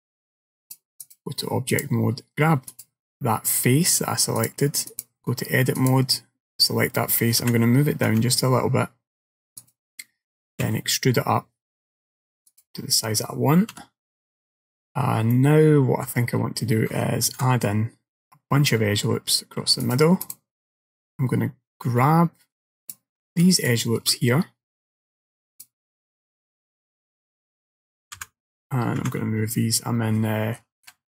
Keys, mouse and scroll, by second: 0.7 click, 1.8 click, 2.8 click, 4.4 click, 5.8 click, 7.5 g, 10.7 e, 13.8 KP_7, 14.7-15.0 scroll down 1, 15.0-15.4 scroll up 3, 15.4 middle click, 16.4-17.0 scroll down 2, 17.3 ctrl+r, 22.9 alt+click, 23.6 alt+shift+click, 25.6 click, 28.2 g.